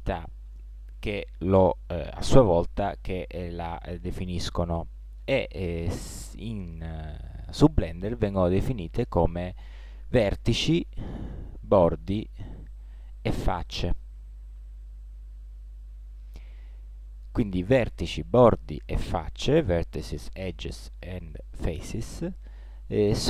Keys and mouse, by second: 15.3 middle click, 15.5 middle click, 17.0 middle click.